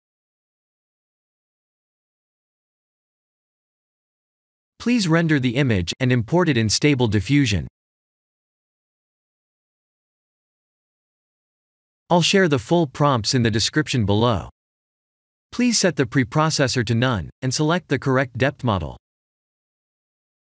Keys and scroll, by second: 1.4 g, 10.1 F12.